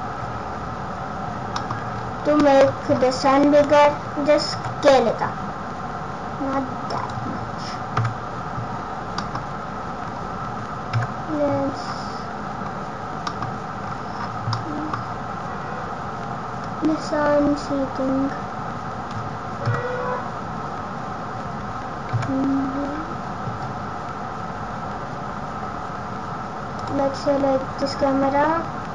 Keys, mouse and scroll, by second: 0.1 scroll down 4, 0.2 scroll up 7, 0.9 scroll up 4, 1.0-1.4 scroll down 3, 1.4 scroll up 1, 1.5 middle click, 1.8-3.3 scroll down 12, 2.4 middle click, 3.5 click, 4.5 s, 8.0 KP_0, 9.1 middle click, 9.9 scroll down 4, 10.9 KP_0, 11.8 scroll down 5, 13.2 middle click, 13.2-14.4 scroll down 13, 14.4 middle click, 15.0 scroll down 2, 16.6 click, 19.7 KP_0, 26.8 click.